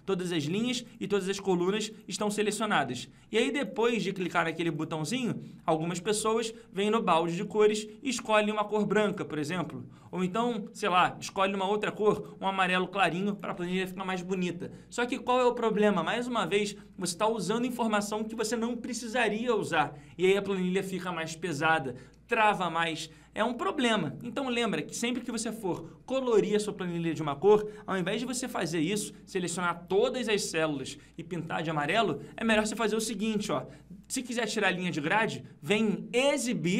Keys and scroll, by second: 31.5 ctrl+z.